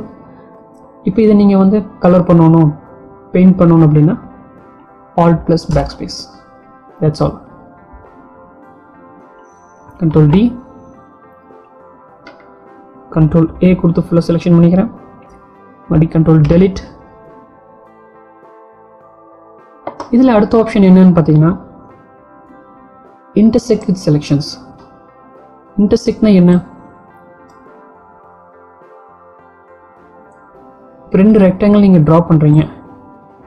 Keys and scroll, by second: 4.1 alt+BackSpace, 10.7 ctrl+d, 14.2 ctrl+a, 16.6 ctrl+Delete.